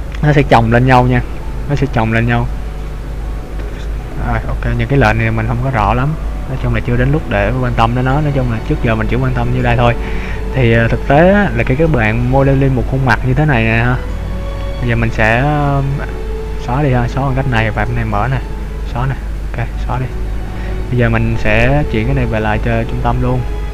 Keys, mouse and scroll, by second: 3.6 click, 4.1 click, 9.4 click, 17.6 click, 18.1 click, 18.9 click, 20.0 middle click, 22.9 click.